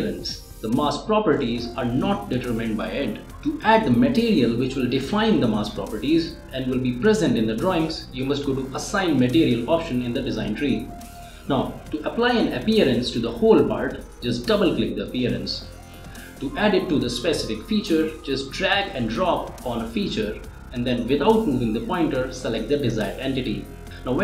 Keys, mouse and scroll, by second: 0.0 click, 1.0 right click, 8.2 click, 13.9 click, 16.4 ctrl+z, 16.9 click, 17.5 click, 17.6 space, 17.9 click, 18.1 ctrl+z, 18.2 click, 19.3-23.9 drag.